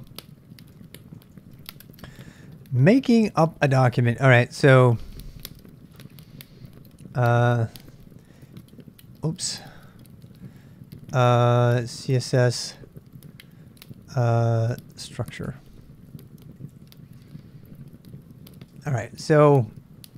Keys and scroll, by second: 0.8 k, 1.2 k, 1.8 k, 2.1 k, 3.5-4.3 typing, 4.7 super+Tab, 8.3 c, 9.6 ctrl+[, 9.6-19.2 typing.